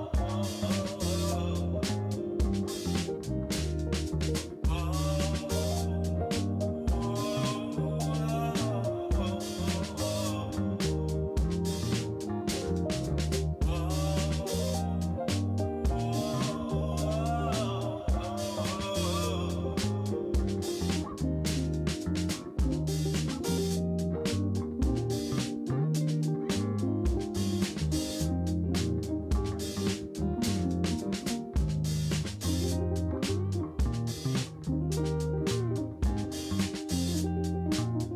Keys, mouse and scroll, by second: 1.3-3.5 drag, 3.0 0, 4.6 click, 9.0 shift+a, 10.5 g, 12.6 KP_7, 13.6-14.8 drag, 15.7-16.1 drag, 17.0-18.1 drag, 22.7 g, 24.1 click, 24.9 shift+a, 26.7 KP_1, 27.1 g, 28.4 KP_7, 29.0 g, 30.4-31.5 drag, 32.2 click, 33.2 KP_0, 34.2 g, 36.0 g.